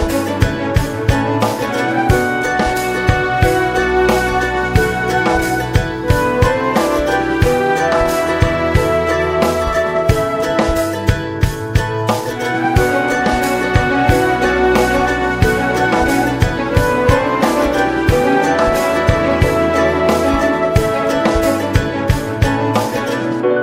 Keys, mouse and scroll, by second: 0.4 click, 0.8-3.1 middle drag, 3.1 space, 7.0 scroll down 2, 7.3 middle click, 8.0 click, 8.4 Tab, 11.0 `, 11.3 scroll down 2, 11.5-14.1 middle drag, 14.1 click, 14.7 middle click, 15.1 scroll down 2, 15.2 shift+middle click, 15.8 scroll up 2, 16.1-18.3 shift+middle drag, 18.3 ctrl+s, 18.8-20.7 middle drag, 20.7 ctrl+s.